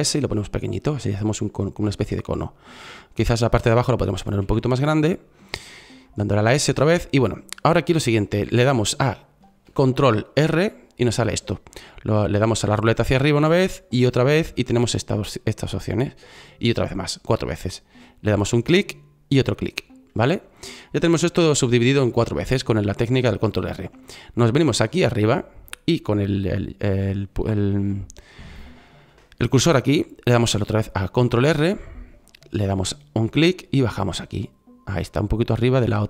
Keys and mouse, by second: 4.3 s, 10.0 ctrl+r, 31.3 ctrl+r.